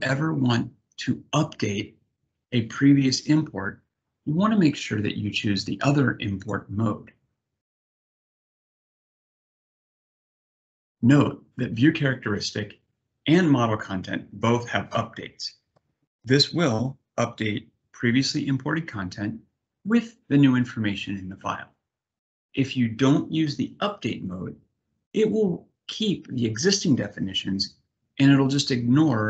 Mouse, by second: 6.1 click, 7.6 click.